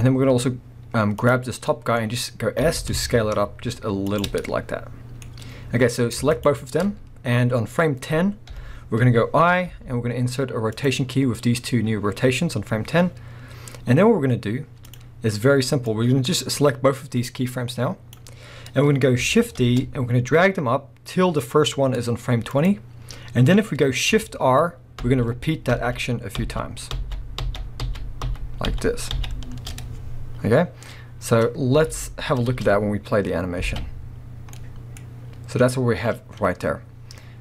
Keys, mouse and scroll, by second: 1.2 click, 1.6 scroll down 1, 1.7-4.2 middle drag, 1.9 scroll up 1, 2.6 s, 4.2 shift+click, 4.3 scroll down 1, 4.4-6.3 middle drag, 6.3 shift+click, 8.5 KP_1, 9.7-10.9 middle drag, 10.9 i, 11.5-11.8 scroll up 1, 14.9 click, 15.9-22.6 drag, 19.6 shift+d, 25.0 shift+r, 31.9 alt+a, 32.5 space, 32.8 scroll down 2, 34.5-37.4 middle drag.